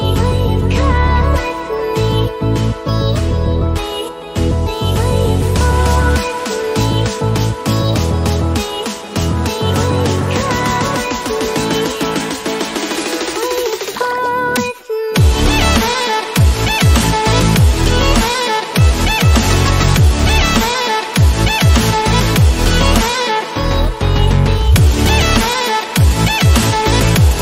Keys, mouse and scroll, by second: 4.0-11.1 drag, 12.0-12.4 scroll down 1, 12.7-13.5 scroll up 1, 13.8 click, 14.8 scroll down 1, 16.1-17.2 scroll down 1, 17.2-20.4 drag, 20.4-22.9 drag, 23.5-24.3 scroll down 1, 25.9-27.4 drag.